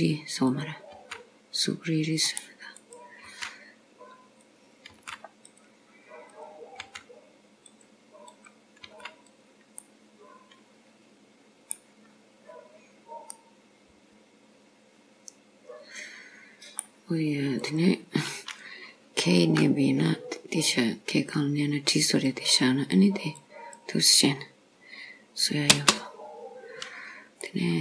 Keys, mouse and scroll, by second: 0.5 click, 1.0 g, 2.9 click, 3.4 g, 5.0 g, 6.4 click, 6.9 g, 8.4 click, 8.9 g, 10.0 middle click, 12.1-12.7 scroll up 5, 13.4 middle click, 17.6 click, 19.5 k, 27.5 middle click.